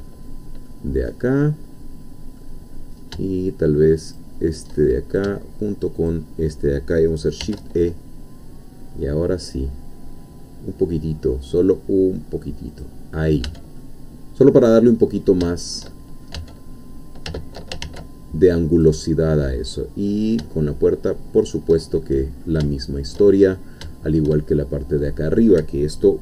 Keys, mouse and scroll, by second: 0.7-2.5 middle drag, 2.7-3.1 scroll up 2, 4.1 shift+click, 4.7 shift+click, 6.1-7.4 shift+drag, 7.4 shift+e, 12.7 click, 13.3 scroll down 2, 13.5 Tab, 13.8-15.4 middle drag, 15.5 shift+middle click, 16.4 shift+Tab, 17.8 ctrl+r, 18.8 click, 21.4 shift+click, 22.0-22.6 shift+scroll down 3, 22.7 shift+middle click, 23.4-23.8 shift+scroll up 3, 23.9 shift+middle click.